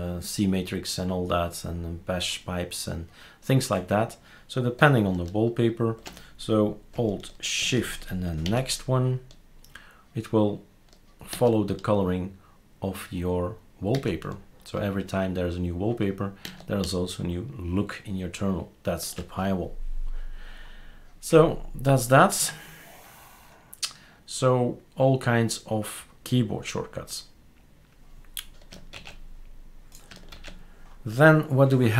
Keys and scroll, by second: 28.9 super+q.